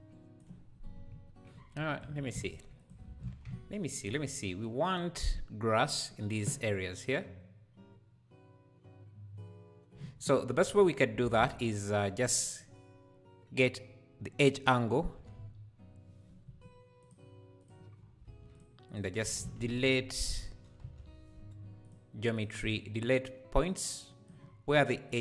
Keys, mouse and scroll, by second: 0.7-1.1 scroll down 1, 1.9 click, 2.1 ctrl+x, 2.4 click, 3.0 ctrl+x, 3.9 scroll up 1, 5.1-5.5 scroll up 1, 10.3 scroll down 1, 10.9-11.2 scroll up 2, 11.2 shift+a, 17.9 scroll up 1, 18.2 shift+a, 22.6-25.2 drag.